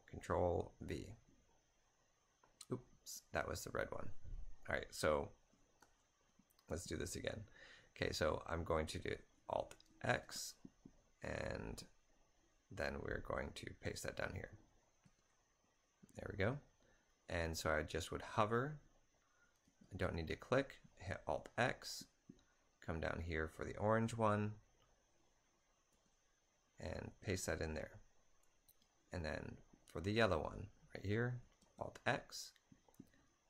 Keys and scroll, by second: 0.0-1.2 typing, 5.9 typing, 5.9 alt+Tab, 10.2 alt+x, 15.1 typing, 17.5-20.0 typing, 20.2 alt+x, 26.0 ctrl+a, 27.2-27.5 typing, 31.2-31.6 typing, 31.7 alt+x.